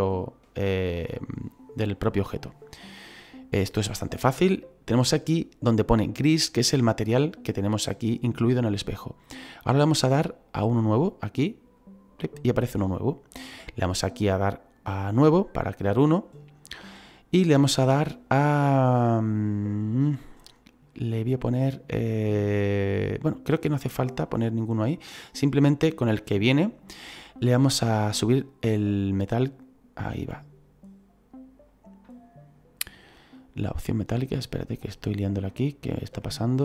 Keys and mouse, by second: 0.5 click, 11.7 click, 15.1 click, 17.9 click, 28.2 click, 33.2 middle click, 36.2 middle click.